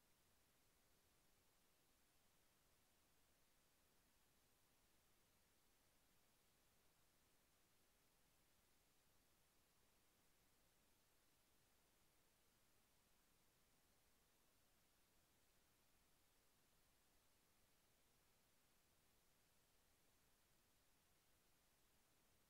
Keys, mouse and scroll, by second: 3.8 click, 12.5 click, 15.0 click, 16.9 click, 19.2 Delete, 19.9 click, 21.3 Delete.